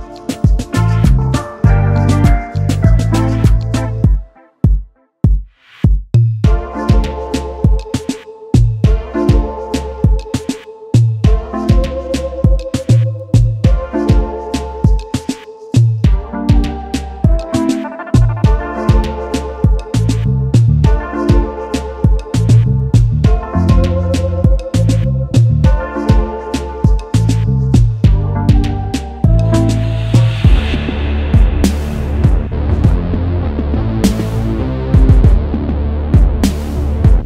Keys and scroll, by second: 25.6 s, 25.6 s, 35.7 Delete, 37.0 Delete.